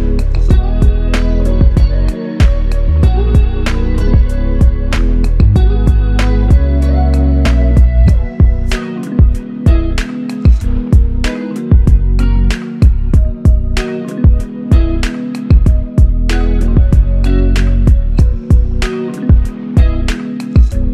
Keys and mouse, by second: 2.5 double click, 14.1 ctrl+click.